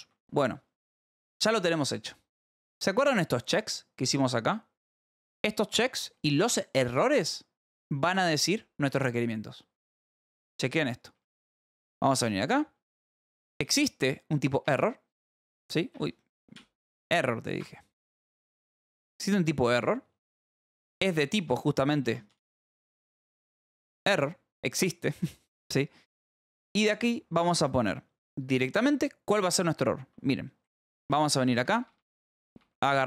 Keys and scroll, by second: 0.5 Escape, 2.7 j, 3.4 j, 8.2 k, 8.8 k, 10.5-13.4 typing, 14.6 Return, 15.9 Escape, 16.5-19.5 typing, 17.5 Escape, 21.1 Left, 21.3-24.5 typing, 21.9 Left, 25.2 Return, 25.7 Right, 26.1 space, 30.0 Escape, 30.5-33.0 typing.